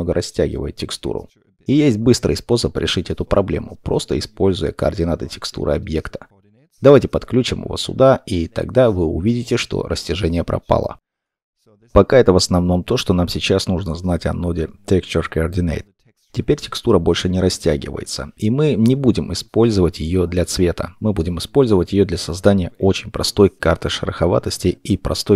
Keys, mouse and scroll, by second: 9.0 middle click, 14.5 scroll down 1, 15.2 middle click, 17.7-19.8 scroll, 19.8 middle click.